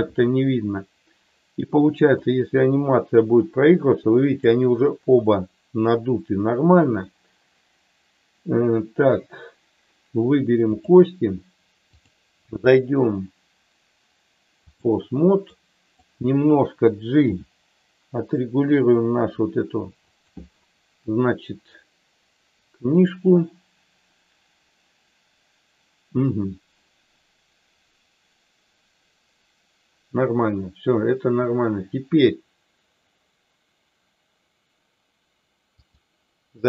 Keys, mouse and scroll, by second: 2.1-4.4 drag, 12.0-14.8 drag, 15.6 click, 17.2 g, 20.1 click, 35.7-36.6 drag.